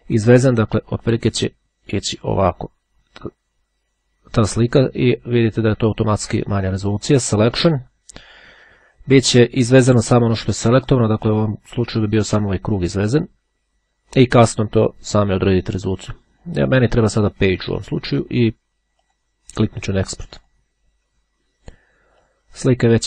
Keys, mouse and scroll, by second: 7.7 click, 9.5 click, 16.9 click, 17.9 click, 19.0 click, 20.1-21.1 drag, 22.1 click.